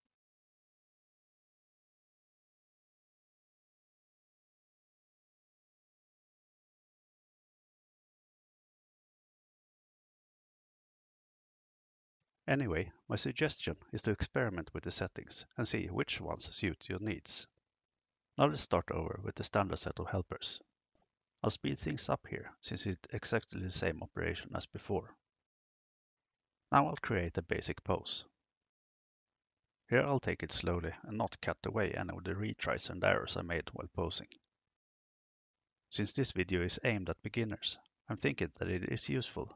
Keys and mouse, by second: 0.8-2.1 drag, 3.4 right click, 4.3 g, 6.6 click, 7.1 right click, 7.4 g, 9.5 right click, 9.7 g, 19.0 click, 19.4 click, 20.2 click, 21.4 click, 21.9 click, 22.5 drag, 23.3 click, 24.6 drag, 25.6 click, 28.0 click, 30.6 KP_3, 32.4 shift+middle click, 33.7 right click, 34.1 shift+right click, 34.9 g, 36.0 click, 36.3 r.